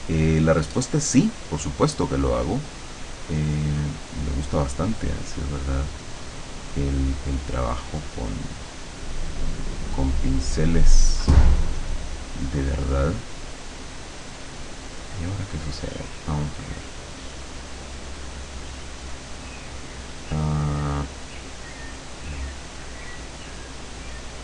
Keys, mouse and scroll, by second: 3.3 click, 5.2-7.1 drag, 7.5-9.5 drag, 11.3 click, 16.8 click, 18.3 click, 18.8 click, 19.3 click, 21.4 click, 22.7 click.